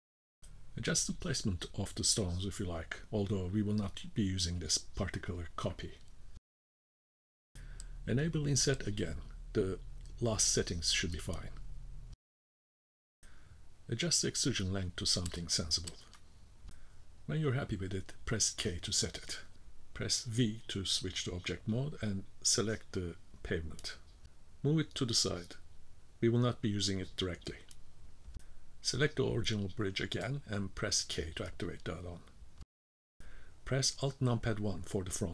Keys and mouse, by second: 2.7-4.1 drag, 5.7-7.2 middle drag, 9.6 click, 11.2 shift+middle click, 12.2-13.6 middle drag, 13.9-16.2 drag, 16.3 middle click, 16.8 middle click, 17.1 shift+middle click, 17.3 middle click, 20.2 k, 20.6 v, 24.3-27.1 drag, 29.2-29.9 middle drag, 31.2 k, 34.3 alt+KP_1.